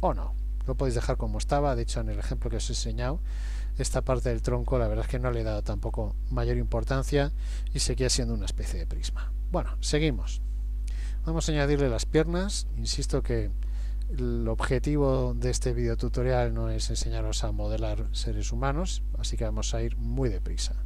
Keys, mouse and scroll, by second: 0.9 Tab, 5.4 KP_1, 6.0 KP_3, 8.3 shift+middle click, 13.3 click.